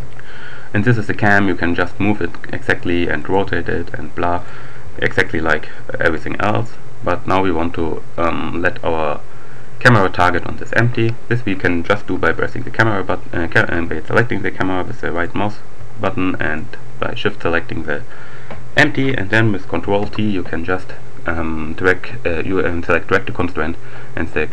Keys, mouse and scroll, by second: 3.2 right click, 3.4 r, 4.4 right click, 4.8 g, 6.0 click, 12.2 click, 14.1 shift+click, 16.3 shift+click, 19.8 ctrl+t, 23.4 click.